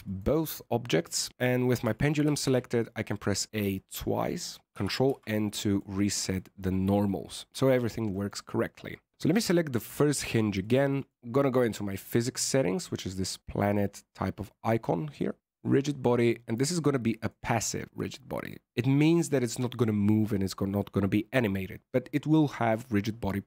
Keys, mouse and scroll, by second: 1.8 Tab, 2.2 a, 2.4 a, 4.7 ctrl+n, 5.0 Tab, 5.5 middle click, 5.8-6.3 scroll down 3, 6.3 middle click, 8.0 scroll up 1, 8.1 middle click, 9.1 right click, 10.5 click, 10.9 click.